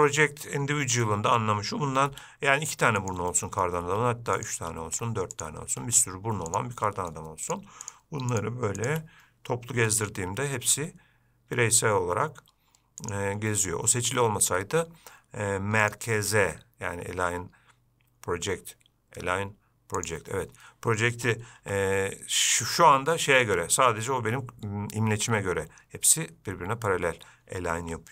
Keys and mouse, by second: 1.3-1.6 shift+middle drag, 2.3 shift+d, 3.5 middle click, 7.1-7.4 middle drag, 9.0 shift+click, 10.0 g, 16.1-20.5 drag, 21.8 g.